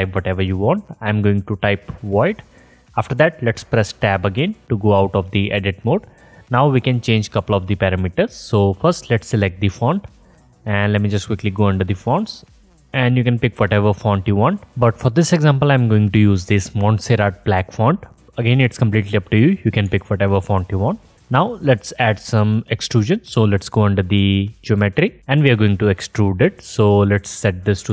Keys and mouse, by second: 3.9 Tab, 8.5-27.9 drag.